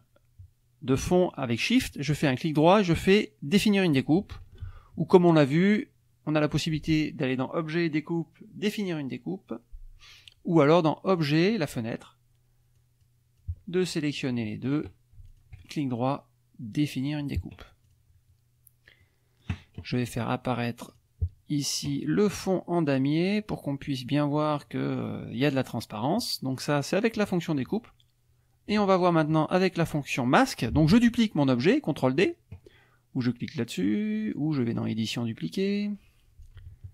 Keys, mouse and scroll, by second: 2.3 shift+right click, 3.7 click, 4.6 ctrl+z, 6.4 click, 11.2 click, 12.8 click, 13.4 click, 14.6 shift+click, 15.3 shift+click, 17.1 click, 17.8 click, 19.0 click, 20.9 click, 23.3 click, 24.6 click, 25.0 click, 25.6 middle click, 25.7 click, 26.2 middle click, 26.8 click, 29.2 middle click, 29.5 click, 29.8 middle click, 31.6 middle click, 31.9 click, 34.8 click, 35.7 click, 36.4-36.9 ctrl+shift+drag.